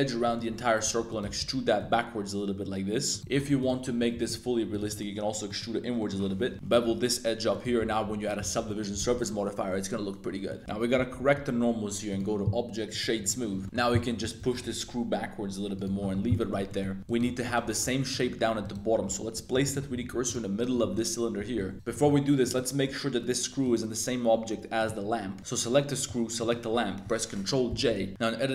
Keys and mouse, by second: 0.0-1.8 typing, 0.2 middle click, 1.1 click, 3.1 alt+click, 3.2 alt+1, 3.3 shift+s, 3.8 middle click, 4.1 e, 4.7 click, 4.7 s, 4.8 z, 4.9 middle click, 5.4 middle click, 5.9 middle click, 6.2 z, 6.3 2, 6.7 super+b, 7.5 click, 7.6 Tab, 8.0 super+1, 8.2 middle click, 8.5 super+2, 8.6 middle drag, 9.0 middle click, 9.3 middle click, 9.9-10.2 middle drag, 10.4 middle click, 10.6 super+a, 10.9 super+n, 11.3 Tab, 12.0-13.0 drag, 13.3 middle click, 13.5 a, 13.6 super+z, 13.6 middle click, 13.9 middle click, 14.2 g, 14.4 x, 15.8 drag, 16.3 middle drag, 16.6 shift+middle click, 17.0 click, 17.4 shift+click, 18.1 middle click, 18.6 right click, 19.0 Tab, 19.3 3, 19.6 alt+click, 19.9 shift+s, 20.7 shift+click, 21.3 1, 21.6 z, 21.7 a, 21.9 shift+click, 22.4 right click, 23.6 right click, 24.7 right click, 25.4-26.0 right drag, 26.4 shift+right click, 27.7 super+j, 28.0 Tab, 28.1 a.